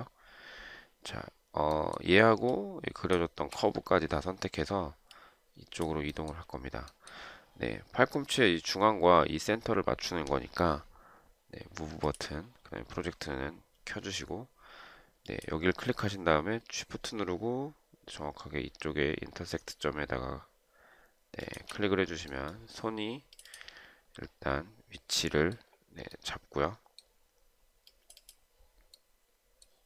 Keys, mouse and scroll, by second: 2.9 shift+click, 21.6 shift+click.